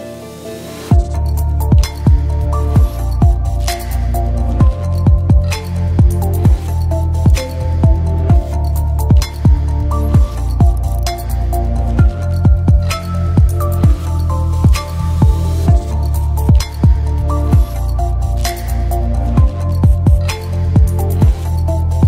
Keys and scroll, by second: 18.6 Escape.